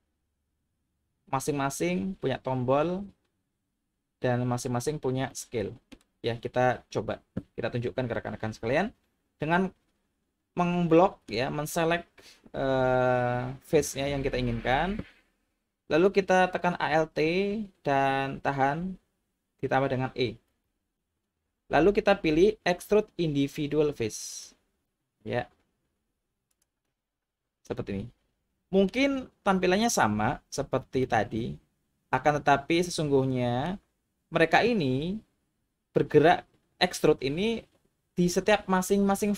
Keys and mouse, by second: 5.3-5.9 middle drag, 11.2 middle click, 20.5 alt+e, 26.5 click, 27.6-28.9 middle drag, 31.1-33.6 middle drag.